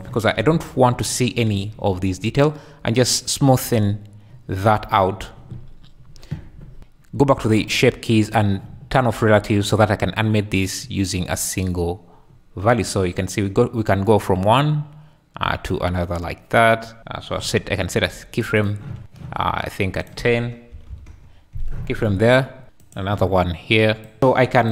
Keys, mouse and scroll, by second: 1.1 `, 2.4 shift+click, 8.3 click, 10.3 click, 11.7-17.0 drag, 18.6 click, 19.9-21.1 drag, 22.8 shift+click, 24.0 click.